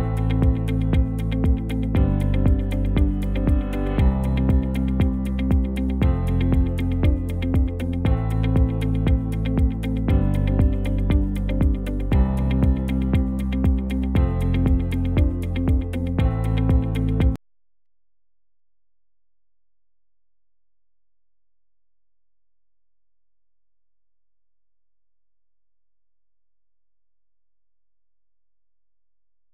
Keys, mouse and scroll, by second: 0.5 space, 5.0 space, 13.4 space, 19.3 space, 20.4 space, 24.8 space, 25.4 ctrl+s.